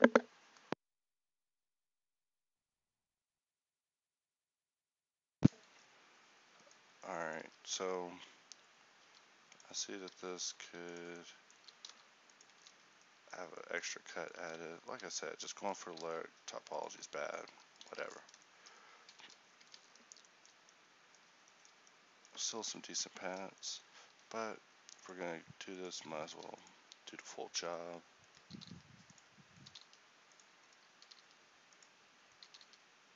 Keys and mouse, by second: 1.9 a, 7.5 Tab, 9.1 ctrl+r, 10.2 alt+s, 11.7 g, 12.7 Tab, 14.5 Tab, 14.9 ctrl+r, 16.1 alt+s, 17.5 g, 18.1 Tab, 19.7 a, 22.5 Tab, 24.2 ctrl+r, 28.6-31.1 drag, 28.6 g, 29.7 g, 31.1 g, 32.6 g.